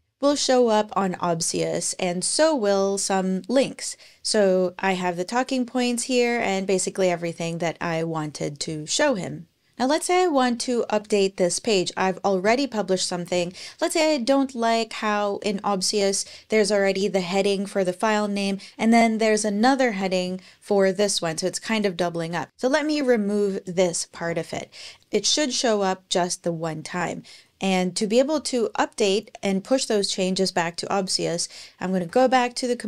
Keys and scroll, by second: 23.9 BackSpace, 24.8 Page_Down, 25.0 Page_Down, 31.9 super+p.